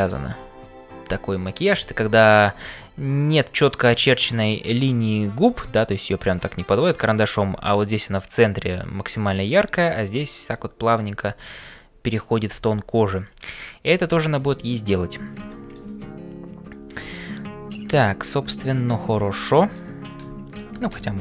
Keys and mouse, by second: 15.6 shift+middle click, 18.8-19.9 middle drag.